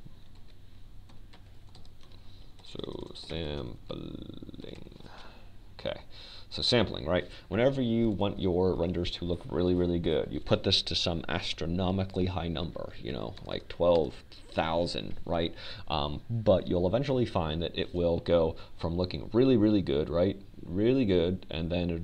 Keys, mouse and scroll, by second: 1.6 r, 3.6 ctrl+z, 4.4 r, 5.4 Tab, 6.4-8.0 typing, 9.4 Tab, 15.5 click, 16.8 KP_0.